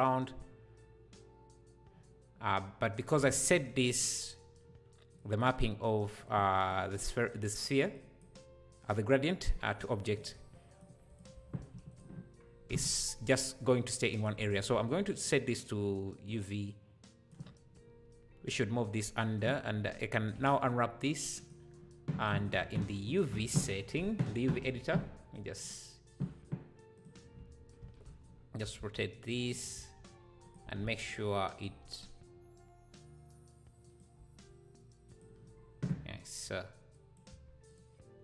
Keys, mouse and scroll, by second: 3.2 Tab, 5.2 click, 6.3 click, 8.0 click, 9.1-11.2 drag, 11.6 shift+d, 12.7 Tab, 13.0 g, 14.5 Tab, 16.3 click, 25.5-27.8 drag, 27.8 a, 30.6 s, 31.7 g, 36.9 click.